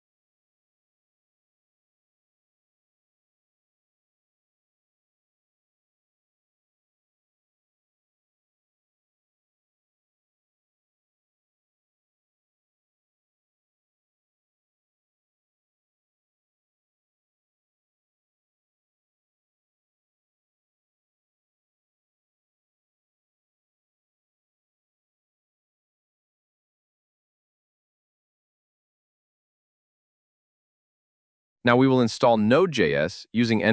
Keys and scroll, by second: 30.0 super+v.